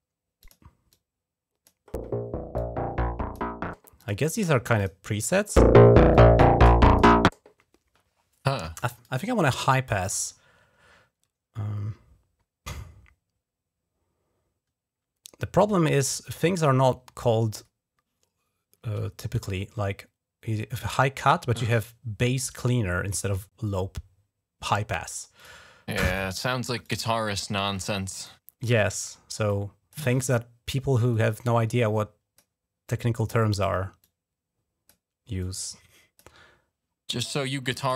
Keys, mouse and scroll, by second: 0.2 click, 0.7 click, 2.4 click, 3.8 click, 4.6 click, 5.9 click, 8.8 click, 25.3 click, 26.6 click, 27.7 click, 28.6 click, 29.3 click, 30.0 click, 31.0-32.2 drag, 32.7 click, 33.9 click, 34.8 right click, 35.2 click, 36.0 right click, 37.5 click, 37.7 right click.